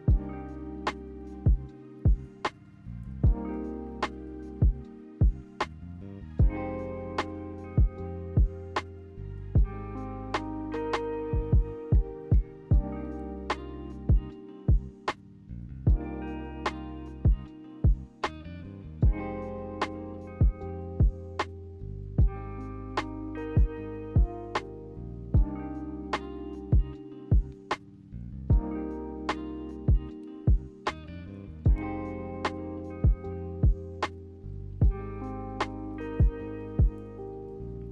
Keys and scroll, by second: 4.2 b, 5.9-9.1 typing, 10.2-10.9 typing, 29.1 z, 35.1 a.